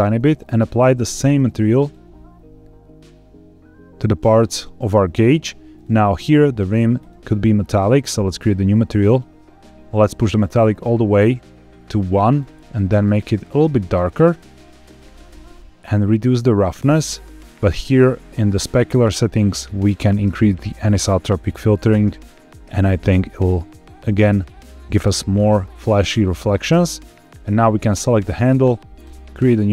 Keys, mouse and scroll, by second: 0.3 click, 1.1 click, 5.6 click, 6.9 click, 7.7-9.1 drag, 12.3 click, 15.5-17.9 drag, 18.4 click, 18.8-19.6 scroll down 2, 19.6-21.0 drag, 24.0 click, 27.6 click, 28.9 click.